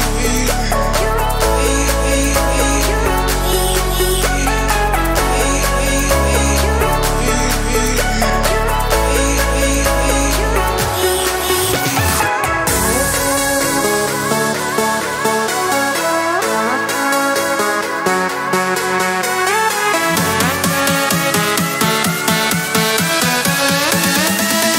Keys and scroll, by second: 11.6 Escape.